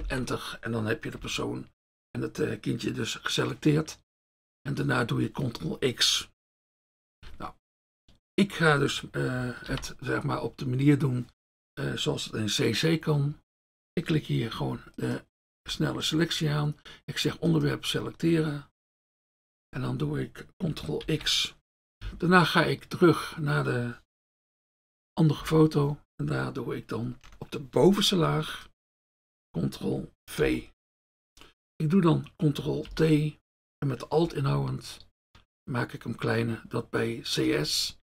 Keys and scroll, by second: 0.0 ctrl+Return, 9.7 ctrl+d, 15.6 F1, 21.0 ctrl+x, 24.3 F1, 30.5 ctrl+v, 32.9 ctrl+t.